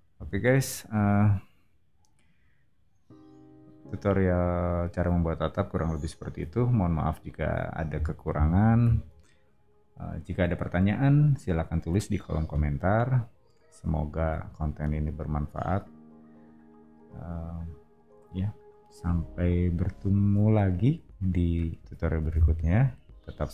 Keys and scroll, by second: 8.8 super+[.